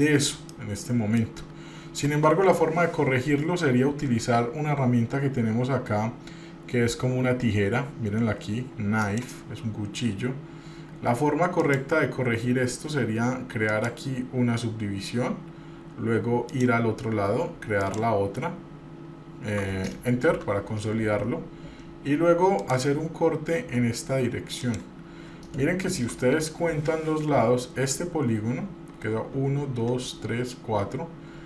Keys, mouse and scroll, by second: 0.3-0.9 scroll down 2, 0.7 shift+middle click, 9.2 click, 11.8-20.7 drag, 22.8-26.5 drag.